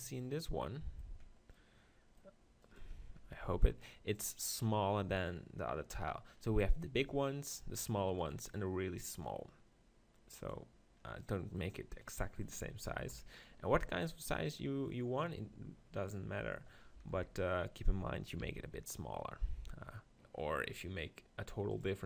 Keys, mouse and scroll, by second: 1.1 click, 1.6 middle click, 2.6 right click, 3.0 Tab, 3.4 Tab, 7.0-12.0 drag, 13.1 KP_1, 17.1 KP_7, 18.4 r, 21.8-22.0 drag.